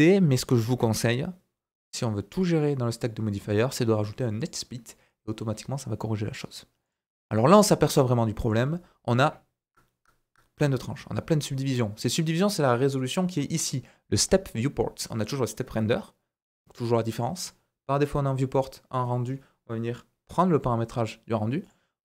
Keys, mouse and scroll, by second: 0.4 right click, 2.4 click, 2.9 click, 4.4 click, 6.8 click, 7.2 scroll down 2, 7.3 middle click, 7.4 typing, 8.7-11.8 scroll down 1, 12.0 click, 21.6 click.